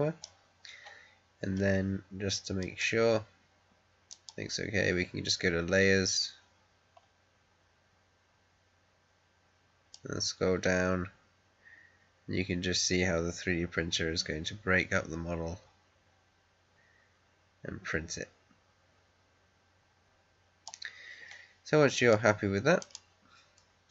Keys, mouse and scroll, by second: 2.5 click, 2.5 click, 9.8-19.8 drag, 21.9 click.